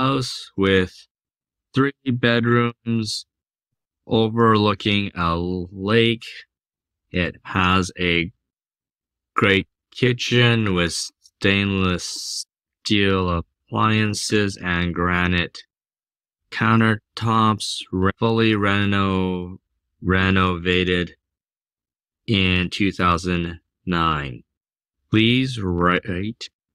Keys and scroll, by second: 0.0-26.7 typing.